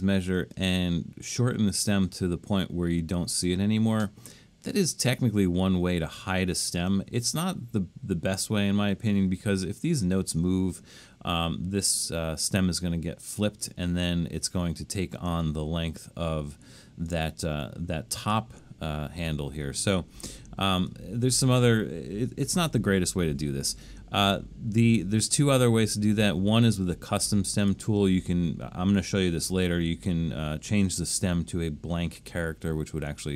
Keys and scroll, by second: 22.7 BackSpace.